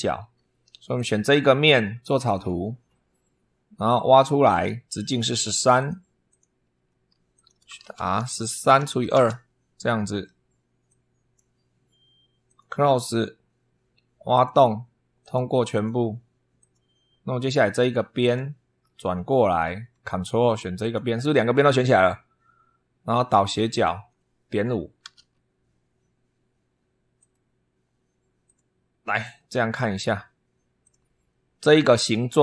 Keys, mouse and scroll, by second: 0.0 super+3, 0.7 click, 2.0 click, 4.2 click, 5.6 click, 6.0 click, 6.5 Escape, 7.1 click, 7.3-9.2 typing, 10.6 click, 12.2 click, 14.1 click, 15.0 click, 15.5 click, 16.4 click, 18.0 click, 18.6-19.6 middle drag, 20.6 ctrl+click, 23.5 click, 24.6-25.5 typing, 27.0 click, 28.2 click, 30.6 click.